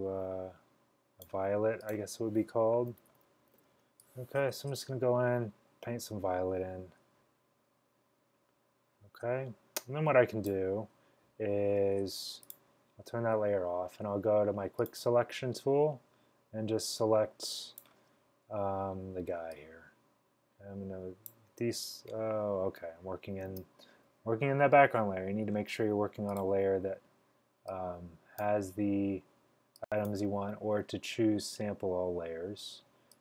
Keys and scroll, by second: 3.0-3.8 typing, 23.6 super+d.